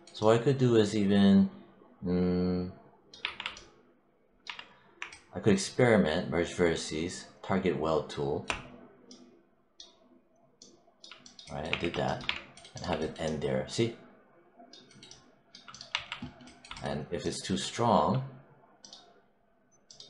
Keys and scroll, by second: 3.1 3, 4.3 1, 11.6 w, 12.1 3, 15.8 1.